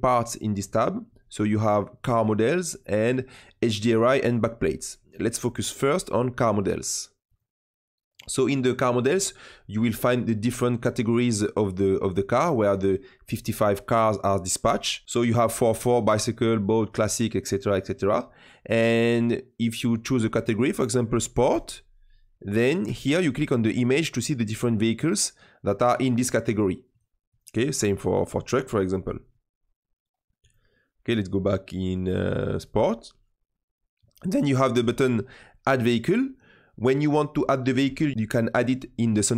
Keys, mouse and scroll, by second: 7.2-10.2 drag, 10.3-13.4 drag, 22.8-25.9 drag, 27.2-34.8 drag.